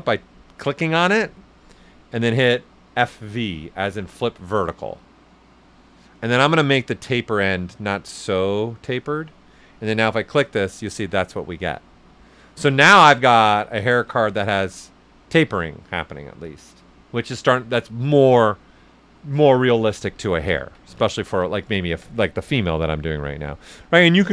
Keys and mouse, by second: 3.1 click, 7.6-9.9 drag, 9.9 click, 10.5 right click, 13.7 click, 14.8-16.9 right drag, 16.9-19.7 right drag, 19.9 right click, 20.1 ctrl+z, 21.0 ctrl+z, 22.5-24.3 drag.